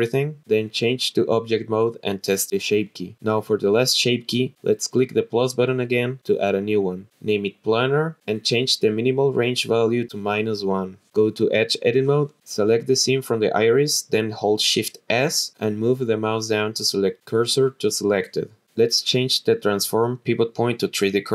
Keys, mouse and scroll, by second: 1.6-2.2 drag, 3.2-4.8 drag, 5.9 click, 6.6 click, 6.8 click, 9.1 click, 12.4 click, 12.6 click, 13.8 click, 14.2 click, 14.8 alt+shift+click, 15.5-16.0 scroll down 1, 16.3 shift+s, 20.5 click.